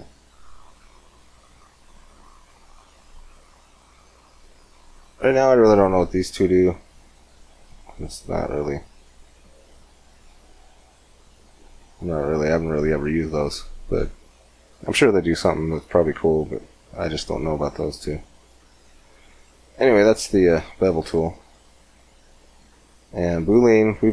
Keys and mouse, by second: 7.8-10.1 drag, 10.1-12.1 middle drag, 12.3-14.3 middle drag, 14.3 click, 14.3 middle click, 14.8 click, 16.1-18.6 middle drag, 18.6-20.6 drag, 20.9-23.0 drag.